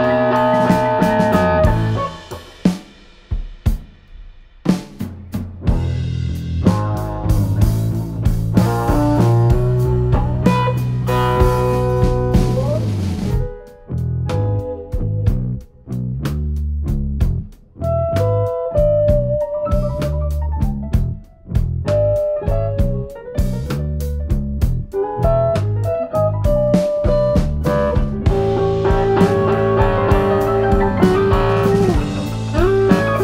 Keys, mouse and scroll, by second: 1.3 middle click, 2.4 Tab, 2.4 ctrl+4, 2.6 middle click, 3.4 click, 5.8 click, 5.8 click, 6.7 e, 8.0 f, 8.0 click, 9.8 click, 10.0 KP_7, 11.3 shift+a, 13.2 click, 15.8 Tab, 16.5 ctrl+r, 19.8 click, 21.8 ctrl+r, 24.8 click, 26.3 1, 27.2 click, 28.3 click, 29.9 click, 30.6 click, 32.4 click.